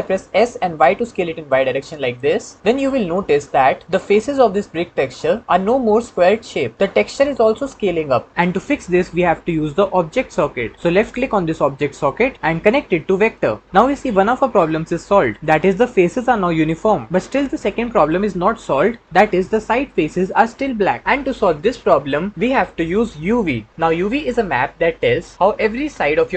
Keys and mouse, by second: 0.1 s, 0.9 y, 2.2 middle click, 2.9 middle click, 15.9-17.6 middle drag.